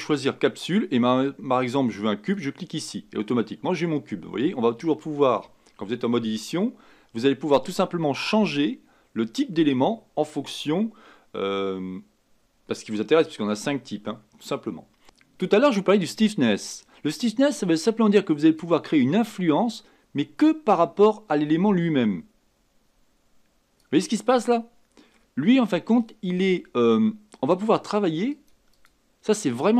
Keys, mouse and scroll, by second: 0.0-3.0 drag, 18.6-21.7 drag, 24.5 middle click, 25.4-26.3 scroll up 3, 27.4 scroll up 1, 27.8-29.7 drag.